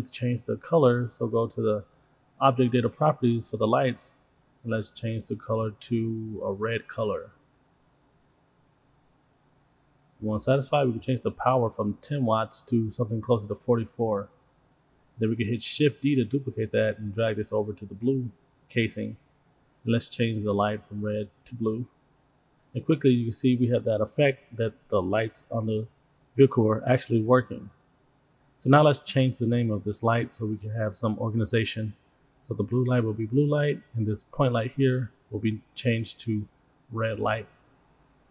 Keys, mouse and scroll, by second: 0.0-0.7 middle drag, 0.7 click, 1.6 click, 4.7 click, 7.2-7.7 middle drag, 8.9 click, 11.6-13.6 drag, 13.8 click, 16.2 shift+d, 18.2-19.7 drag, 20.6 click, 22.6-26.2 middle drag, 26.6 scroll down 2, 27.2 click, 27.9 click, 28.3-33.9 drag, 35.6 click, 36.1 click, 37.0 click, 37.1-38.3 drag.